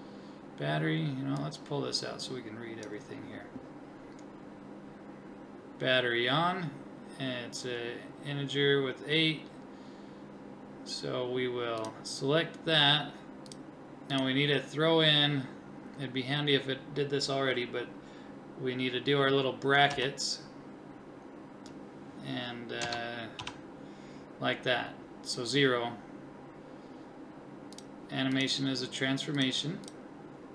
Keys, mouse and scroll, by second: 1.4 click.